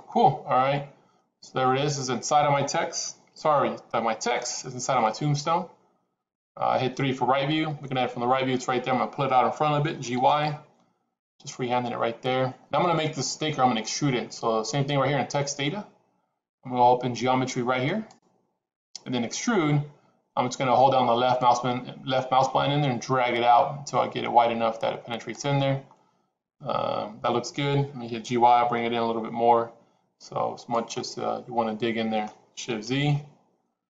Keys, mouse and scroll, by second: 0.0-2.4 middle drag, 3.2 KP_3, 9.8 g, 17.8 click, 21.3-25.2 drag, 28.0 g, 30.8-32.2 middle drag.